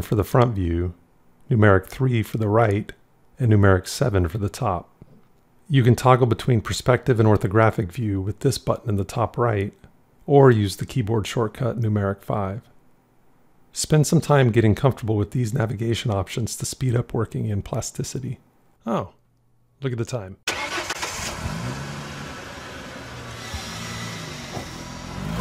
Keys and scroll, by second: 1.3 KP_3, 3.1 KP_7, 11.0 KP_5.